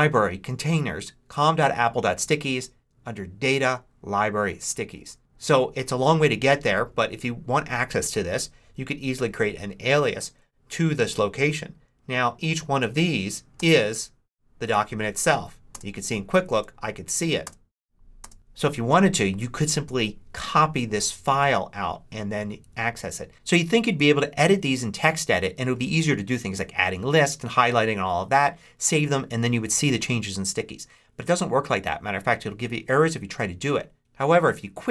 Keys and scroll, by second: 13.5 space.